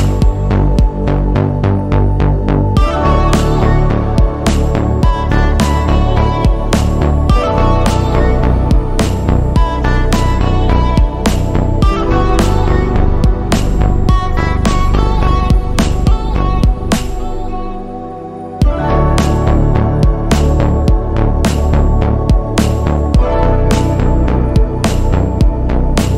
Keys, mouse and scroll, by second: 0.9 click, 1.7 click, 2.6 Escape, 3.4 click, 4.1 click, 4.7 click, 5.2 3, 5.6 click, 6.3 scroll up 2, 6.7 shift+middle click, 7.7 click, 9.1 click, 9.6 click, 10.3 click, 10.9 3, 11.3 click, 11.9 click, 13.2 click, 14.5 scroll down 2, 14.8 shift+middle click, 17.2 click, 20.0 super+2, 20.9 click, 21.8-22.6 typing, 23.3 click, 23.8 scroll down 2, 24.1 shift+middle click, 24.6-25.9 middle drag.